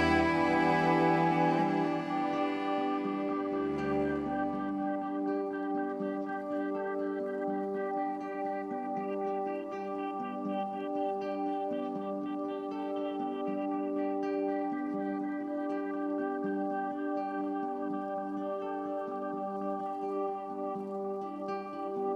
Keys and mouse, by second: 1.8-3.6 drag, 4.7 click, 5.1 click, 5.6 click, 5.9 click, 6.7 click, 7.2 click, 8.0 click, 8.4 click, 9.2 click, 10.5 click, 10.9 click, 11.6 click, 12.7 click, 13.8 typing, 15.8 click, 15.8 typing, 17.9-19.6 alt+drag.